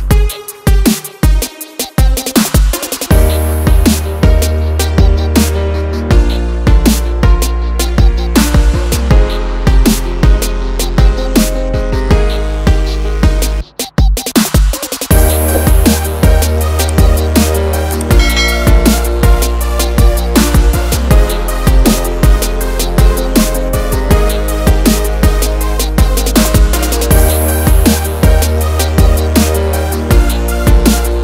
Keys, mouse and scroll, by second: 0.0 click, 0.7 click, 1.1 double click, 2.0 click, 2.9 shift+Up, 5.0 click, 7.4 click, 7.5 double click, 8.6 click, 9.4 v, 11.7 click, 13.1 ctrl+z, 13.6 ctrl+click, 14.7 Page_Down, 16.4 ctrl+click, 17.8 F8, 18.5 click, 20.0 shift+s, 21.0 h, 23.4 click, 24.5 f, 24.5 d, 24.7 v, 26.0 click, 26.9 ctrl+z, 28.2 ctrl+click, 29.9 F8.